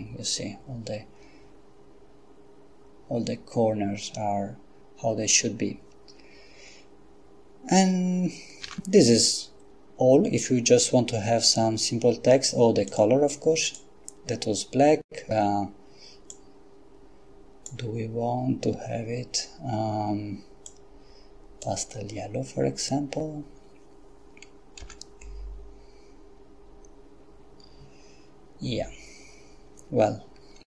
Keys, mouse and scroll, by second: 8.7 Escape, 12.9 click, 13.7 click, 16.4-18.2 drag, 20.7 click, 24.8 F12.